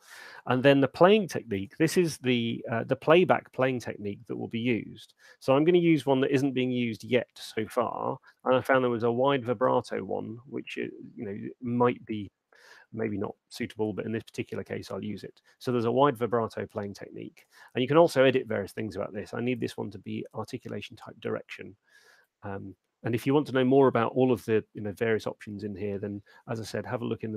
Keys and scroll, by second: 7.6-8.4 typing, 10.0 Return.